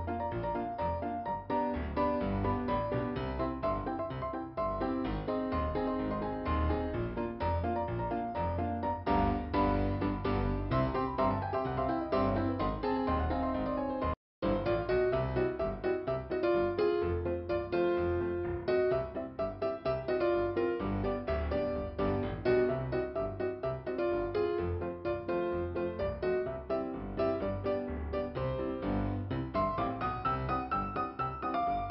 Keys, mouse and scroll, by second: 3.9 click, 4.3 scroll down 2, 7.7 click, 8.2 double click, 8.6 double click, 11.6 middle click, 18.2 click, 18.5 click, 18.9 double click, 20.3 ,, 20.9 click, 22.2 click, 23.1 scroll up 1, 23.6 click, 25.2 scroll up 1, 26.8 click, 28.1 scroll down 1, 30.3 scroll up 2.